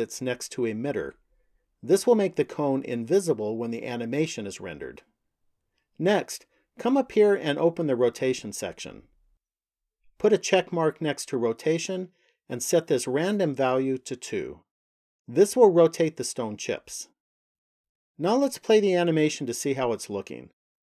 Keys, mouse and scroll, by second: 0.4 click, 5.8 click, 9.0 click, 11.1 click, 13.2 click.